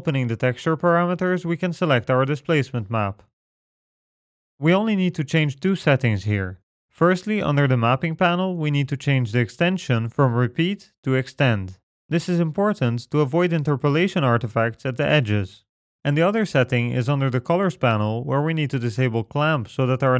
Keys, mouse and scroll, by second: 1.0 click, 2.4 click, 5.1-6.2 scroll down 3, 6.2-7.2 scroll down 2, 7.2 click, 7.8-8.3 scroll down 3, 9.5 click, 16.1-16.8 scroll down 2, 16.8 click, 17.3-18.1 scroll down 3, 18.1-19.0 scroll down 1.